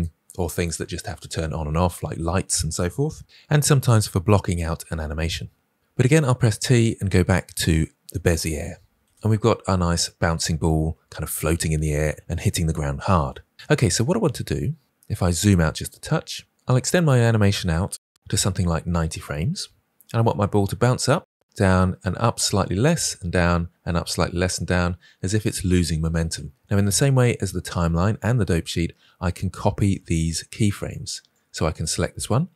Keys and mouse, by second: 6.4 t, 9.0 space, 14.2 space, 15.5 shift+middle click, 16.0 ctrl+middle click, 17.6-18.8 shift+middle drag, 18.8 click, 31.2-31.8 drag.